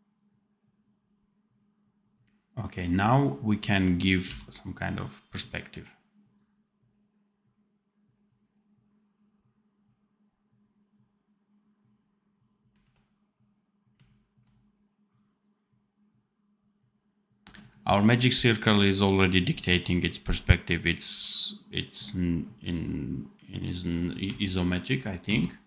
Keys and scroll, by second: 4.1 v, 25.1 ctrl+z.